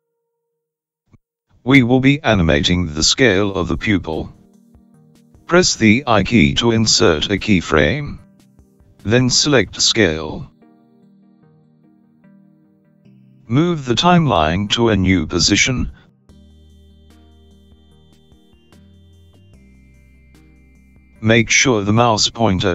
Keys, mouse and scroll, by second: 6.2 i, 14.5 click.